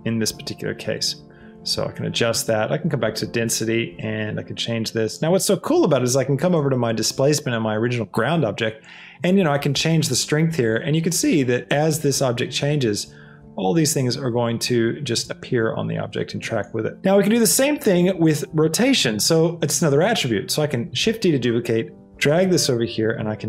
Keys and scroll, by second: 21.0 shift+d.